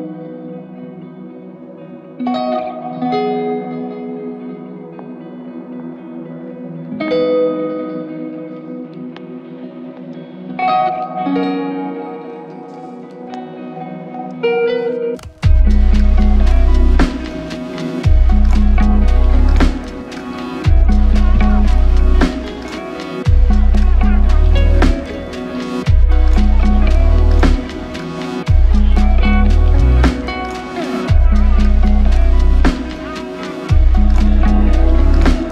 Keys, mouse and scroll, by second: 2.2 alt+click, 3.5 alt+click, 5.4-6.2 typing, 8.5-10.1 typing, 15.3 double click, 17.5 alt+click, 20.0 double click, 31.4 double click.